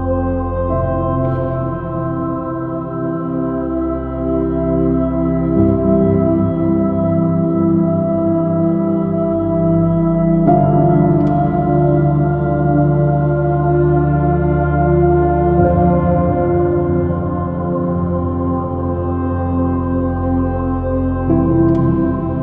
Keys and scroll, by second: 15.5 super+z.